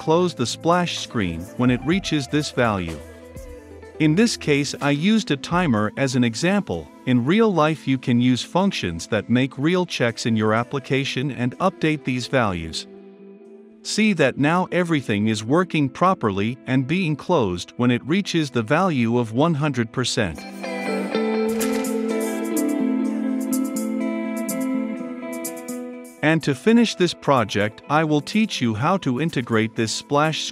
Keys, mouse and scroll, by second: 2.2-3.7 drag, 3.7 Return, 3.7-4.5 typing, 5.7-8.0 typing, 5.8 Return, 6.0 click, 8.7 ctrl+F5, 12.9-17.3 drag, 18.2-20.2 drag, 20.4 ctrl+F5, 23.0-25.0 drag, 25.3 ctrl+F5, 27.3 click, 29.4 ctrl+F5.